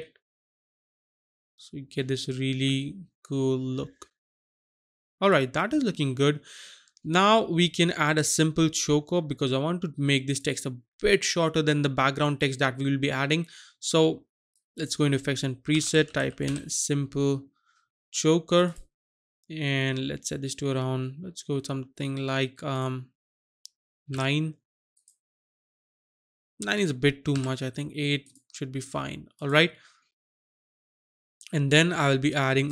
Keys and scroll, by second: 15.8-16.4 typing, 24.2 KP_9, 27.4 KP_8.